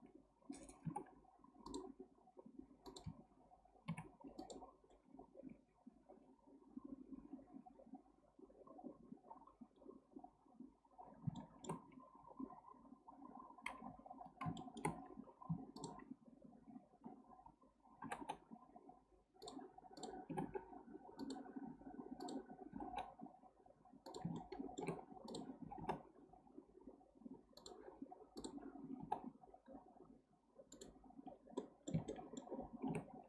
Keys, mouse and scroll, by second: 0.8 k, 4.3 1, 4.4 click, 4.9-5.4 scroll down 1, 5.4-6.0 scroll up 1, 6.0-8.4 scroll up 1, 9.5-11.4 scroll down 4, 11.4-11.9 shift+middle drag, 11.9-14.1 scroll up 5, 14.1-14.6 scroll down 1, 14.6-14.9 shift+middle drag, 14.9-15.5 scroll up 1, 15.5 1, 15.8 drag, 18.0 g, 20.0 click, 20.3 g, 22.2 click, 22.7 g, 24.4 shift+middle click, 25.3 click, 25.6 g, 28.4 click, 28.8 g, 31.2-31.6 scroll down 1, 31.6-33.1 middle drag, 33.1-33.2 scroll up 2.